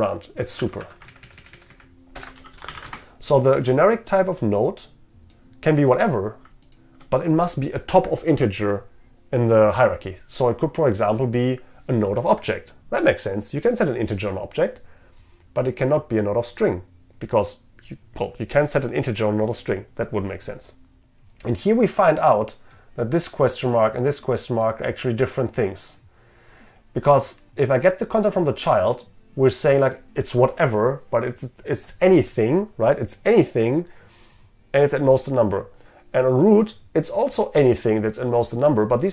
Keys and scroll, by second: 2.3 ctrl+BackSpace.